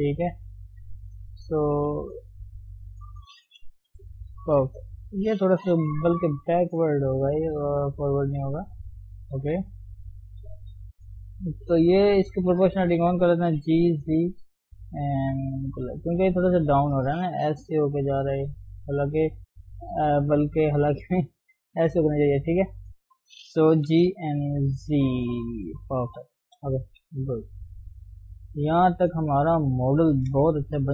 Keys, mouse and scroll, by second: 0.2-0.7 scroll up 2, 0.7 scroll up 3, 0.9 click, 1.1 shift+z, 1.4-2.5 shift+middle drag, 2.5 ctrl+click, 2.8 shift+middle click, 3.7 g, 5.2 click, 5.4-5.9 scroll down 2, 5.9 g, 7.0 click, 7.2 g, 8.4 click, 9.0 click, 9.4 g, 11.2 click, 12.0 click, 12.9 o, 13.6 g, 17.6 click, 18.4 d, 19.3-21.0 right drag, 21.0-22.7 drag, 22.7-23.8 right drag, 23.8 g, 25.9-26.6 scroll down 4, 26.6 KP_1, 27.3 Tab, 27.4-28.2 scroll up 2, 28.2-28.9 scroll down 1, 28.9-30.2 middle drag, 30.2 ctrl+shift+s.